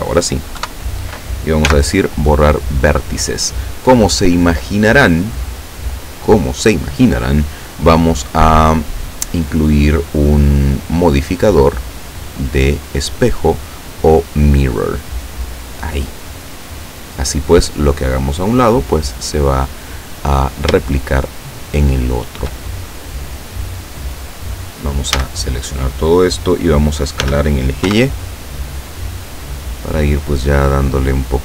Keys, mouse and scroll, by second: 0.7 KP_7, 1.8 x, 2.5 click, 10.8 click, 11.9 click, 15.4 click, 20.1-20.6 scroll up 1, 21.0-22.6 shift+drag, 25.2 a, 27.3 s, 27.9 y, 29.4 click, 30.5-31.4 drag.